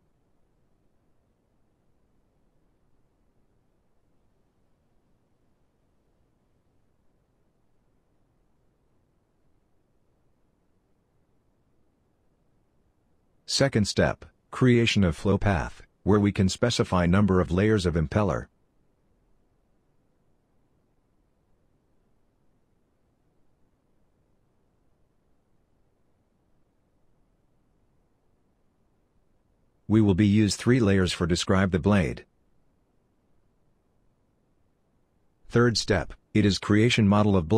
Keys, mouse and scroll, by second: 28.7 right click.